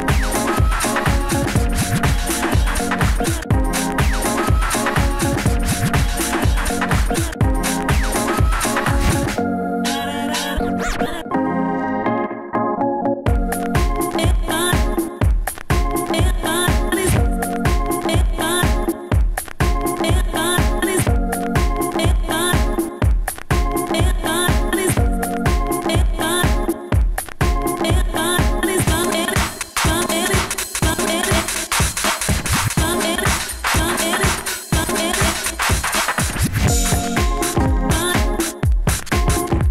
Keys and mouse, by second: 0.0 ctrl+Down, 4.5 n, 8.3 Tab, 13.2 Tab, 21.0 a, 21.7 Tab, 21.7 a, 21.8 ctrl+s, 31.0 a, 31.2 a, 32.2 alt+r, 33.1 a, 33.3 a, 34.6 Tab.